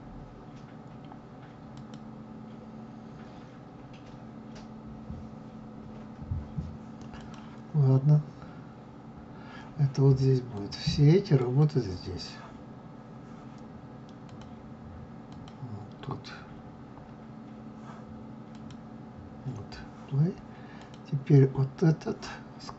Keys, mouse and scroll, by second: 1.5 click, 6.9 click, 10.3-13.3 drag, 13.9 click, 15.0 click, 18.2 click, 20.5 click.